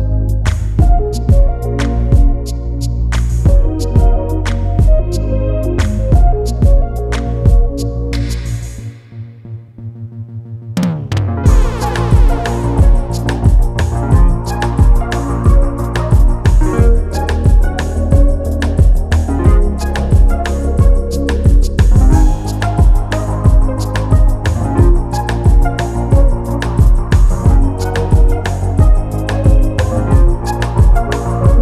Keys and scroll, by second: 3.2 ctrl+shift+], 20.6 ctrl+s, 21.2 ctrl+alt+s, 30.3 ctrl+t.